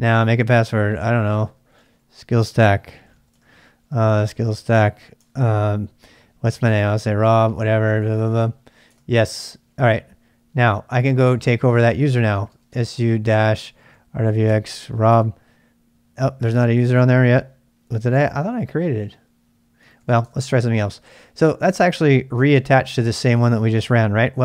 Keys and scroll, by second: 1.0-5.1 typing, 6.4-7.4 typing, 7.5 Return, 7.8 Return, 8.0 Return, 8.1 Return, 8.9 Return, 9.4-10.1 typing, 12.1-14.3 typing, 14.4 Tab, 15.1 Return, 19.5-20.6 typing, 22.3 Up.